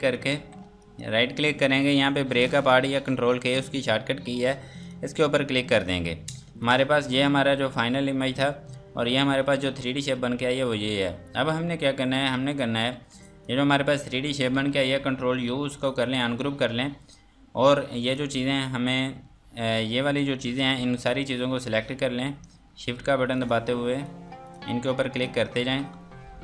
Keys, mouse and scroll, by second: 0.8 right click, 4.8 click, 12.5 click, 12.9 F2, 13.1 click, 17.7 F2, 18.1 click, 18.9 Escape, 19.7 click, 20.6 z, 23.4 shift+click, 24.0 shift+click, 24.4 shift+click, 25.2 shift+click, 25.9 scroll up 1.